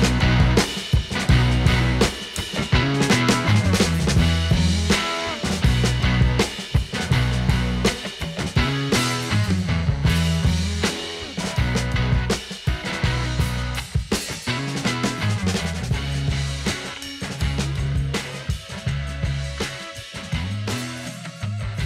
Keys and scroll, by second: 6.2 ctrl+=, 8.5 ctrl+-, 18.9 ctrl+=.